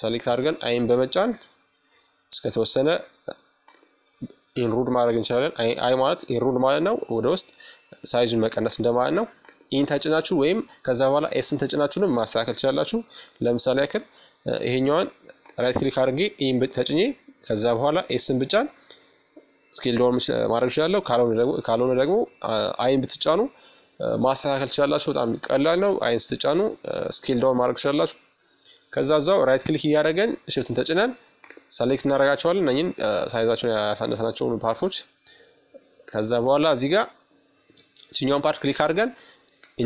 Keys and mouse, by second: 1.2-3.1 right drag, 4.7-6.6 middle drag, 6.2-10.9 right drag, 11.4-12.9 middle drag, 12.9-15.0 right drag, 15.4 s, 19.0-21.8 middle drag, 21.8-23.6 right drag, 26.8-29.0 right drag, 29.0 middle click, 29.4-30.7 right drag, 29.6-31.2 middle drag, 31.5-33.8 right drag, 32.2-33.3 middle drag, 35.3-37.1 drag, 38.9 KP_1.